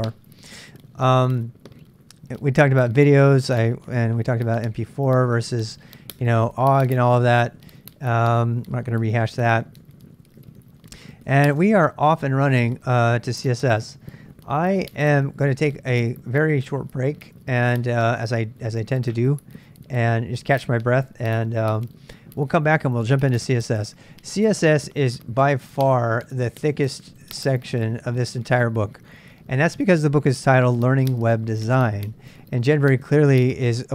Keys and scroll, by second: 0.0 j, 10.8 j, 11.3 j.